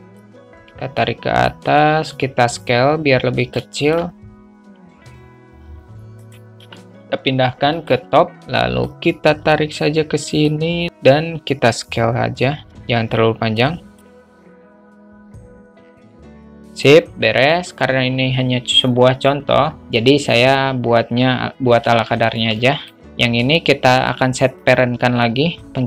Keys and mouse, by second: 0.6-1.8 drag, 2.4 s, 3.9 shift+a, 4.1 shift+middle drag, 4.9 s, 8.4 alt+middle click, 9.2-10.8 drag, 11.1 click, 12.7 ctrl+z, 13.9 click, 14.4 click, 15.0 middle drag, 15.8 alt+middle click, 16.0-22.3 drag, 22.5 alt+shift+middle click, 22.9 middle click, 23.0 click.